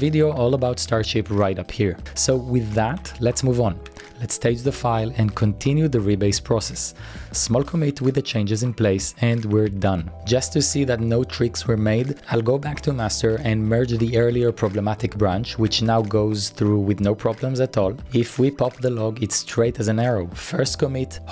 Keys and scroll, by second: 0.2-3.0 typing, 4.1 typing, 6.8-8.4 typing, 9.7 shift+z, 12.0-15.1 typing, 18.0-18.7 typing.